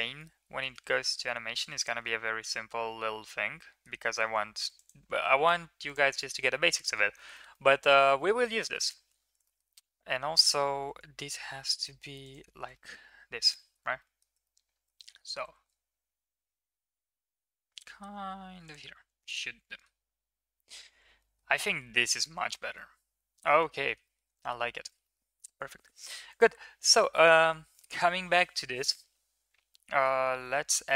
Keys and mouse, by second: 0.0-0.5 middle drag, 0.7 shift+middle drag, 1.4 middle drag, 2.3-3.7 middle drag, 3.8 Tab, 6.3 middle drag, 6.7 ctrl+s, 7.2 shift+middle click, 7.4-8.6 middle drag, 8.8 ctrl+s, 9.3 middle drag, 10.6 g, 12.6 middle click, 13.4 middle drag, 13.9 middle click, 14.4-14.8 shift+middle drag, 19.1 middle click, 19.3 ctrl+s, 19.5 middle drag, 21.0 middle click, 21.6-21.9 middle drag, 22.6-23.5 middle drag, 23.7 shift+middle click, 23.9 middle drag, 24.4 ctrl+s, 24.7 shift+middle click, 24.9 middle click, 26.1 click, 30.2 KP_1.